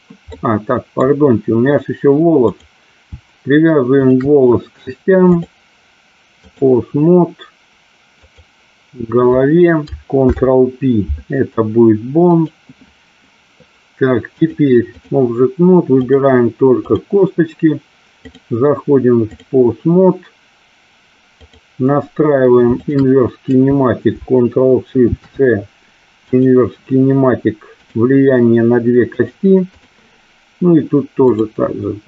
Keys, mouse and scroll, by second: 0.4 middle click, 2.6 click, 4.1 shift+click, 5.5-6.8 drag, 8.3 click, 10.2 ctrl+p, 14.5 click, 16.0 click, 18.3-19.6 drag, 21.4 click, 22.7 shift+click, 27.8 click, 29.8 click, 31.3 click.